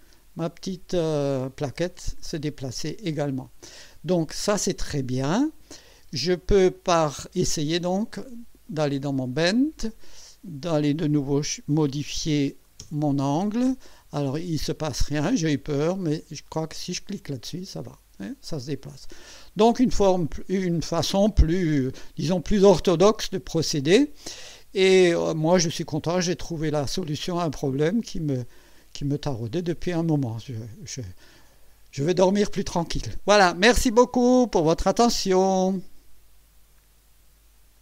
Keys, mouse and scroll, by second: 0.9-2.8 drag, 5.7 click, 6.0 space, 6.7-7.5 drag, 8.7 click, 10.5 click, 11.7 KP_4, 12.1 KP_5, 12.8 Return, 16.4 click, 17.5-20.4 drag, 21.7 scroll down 2, 23.7 scroll down 1, 24.1 scroll up 1, 25.1-30.8 drag, 31.0-33.3 drag.